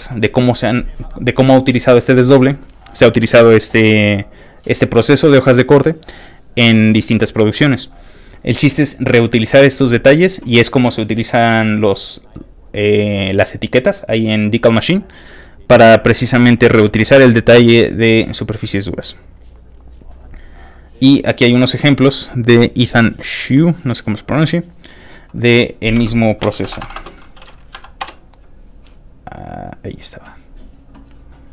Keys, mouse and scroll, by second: 15.4 click, 18.4 click, 19.6 click, 20.3 click, 23.5 click, 24.7 click, 25.6 click, 26.0-27.5 typing, 27.8 Down, 28.1 Return, 29.2 click, 31.2 middle click, 31.3 scroll down 1.